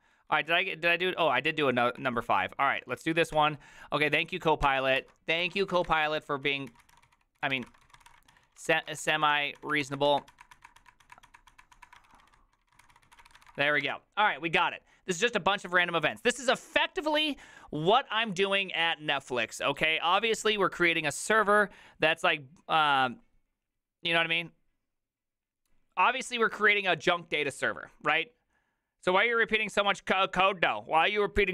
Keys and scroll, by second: 0.3 ctrl+u, 1.3 ctrl+d, 1.4 ctrl+d, 1.6 ctrl+d, 1.7 ctrl+d, 2.7-3.9 typing, 4.7 Tab, 5.0 ctrl+c, 5.2-14.0 typing.